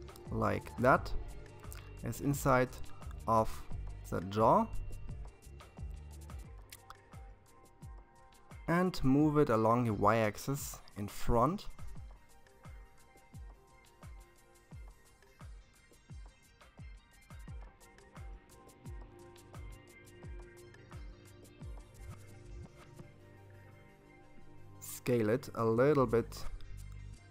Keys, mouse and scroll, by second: 2.6 KP_7, 4.7-6.7 scroll down 9, 6.7-8.7 scroll up 3, 8.7 g, 14.5-16.1 scroll up 9, 16.1 scroll up 1, 19.1-20.0 scroll down 2, 21.5 s, 27.1-27.3 scroll down 2.